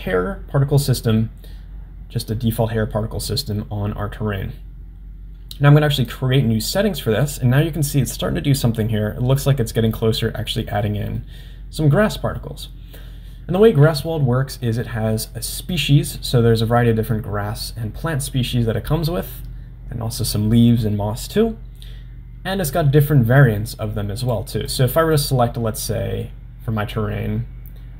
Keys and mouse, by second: 6.0 click, 10.0-11.2 middle drag, 15.8-22.4 drag, 24.2 click, 25.3-27.9 drag.